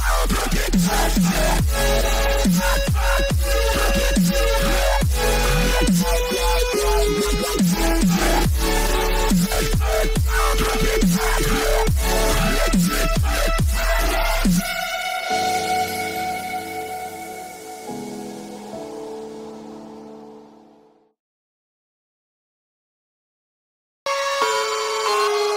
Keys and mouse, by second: 0.0 click, 3.2 click, 9.9 click, 21.1-22.9 drag, 25.2 click.